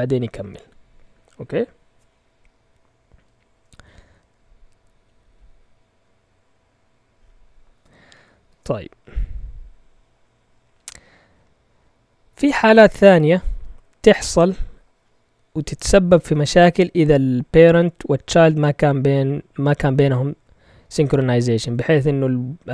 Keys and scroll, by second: 8.4 ctrl+l.